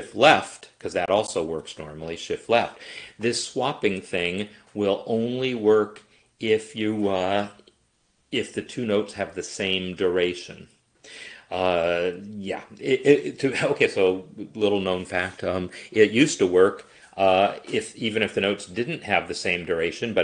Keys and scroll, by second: 0.1 shift+Left.